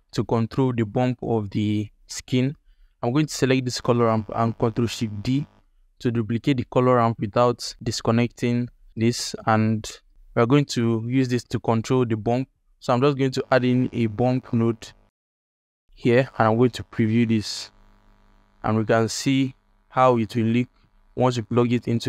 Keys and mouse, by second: 5.1 ctrl+shift+d, 8.8 click, 9.1 alt+shift+click, 9.6 click, 11.4 alt+shift+click, 11.9-12.4 drag, 13.0-16.0 drag, 17.8-18.4 ctrl+alt+drag, 19.3-19.6 ctrl+alt+drag, 20.7 alt+shift+click.